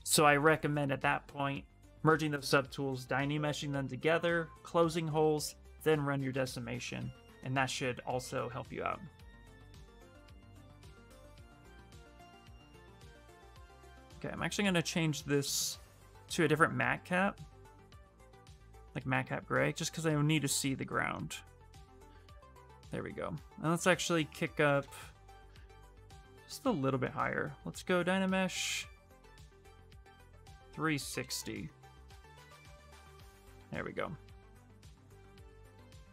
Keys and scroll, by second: 14.8 s, 20.4 s, 25.1 shift+f, 30.3 BackSpace.